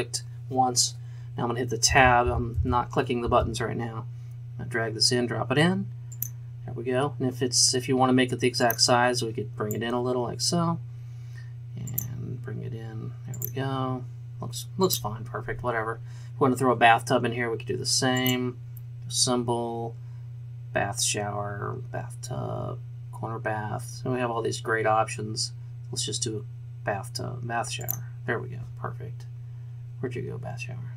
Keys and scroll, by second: 2.0 Tab, 2.2 Tab, 2.6 Tab, 3.2 Tab.